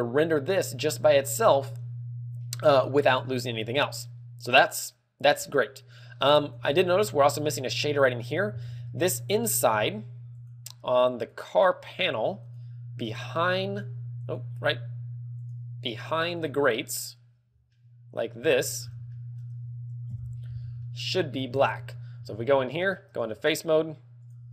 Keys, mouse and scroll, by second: 6.9-7.6 scroll up 6, 9.0 z, 10.3 right click, 11.2 right click, 12.1 right click, 13.3 right click, 14.2 right click, 15.3 right click, 17.2 right click, 18.2 middle click, 18.7 KP_3, 19.0-19.4 scroll down 6, 19.4 shift+middle click, 20.4 KP_Divide, 20.8 z, 21.1 middle click, 21.8 shift+middle click, 22.1-22.5 scroll up 7, 22.7 Tab, 22.8 shift+middle click, 23.8 ctrl+Tab.